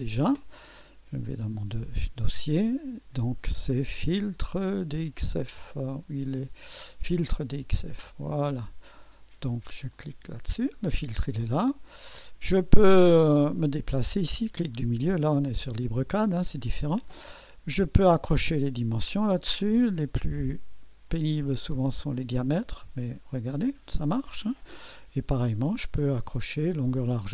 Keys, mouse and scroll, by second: 1.2 click, 6.4 click, 7.5 click, 9.9 click, 11.9-12.2 scroll down 1, 12.6-14.1 middle drag, 14.2-15.0 scroll up 2, 15.3-15.9 middle drag, 16.0 scroll up 1, 21.1 click, 22.7 click, 24.0 click, 24.6-25.8 scroll down 4, 26.0 middle click.